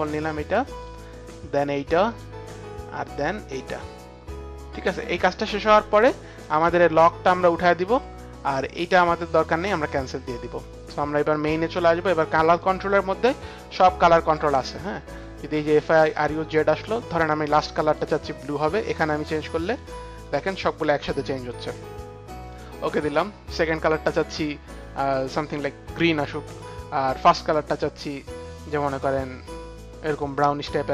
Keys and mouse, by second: 0.7 click, 1.4 click, 2.1 click, 4.7 click, 7.3 click, 8.5 click, 9.5 click, 11.0 click, 12.5 click, 14.4 click, 16.7 click, 17.8 click, 19.3 click, 19.6 click, 20.5 click, 22.1 click, 22.4 click, 23.5 click, 25.3 click, 26.5 click, 27.3 click, 28.5 click, 30.7 click.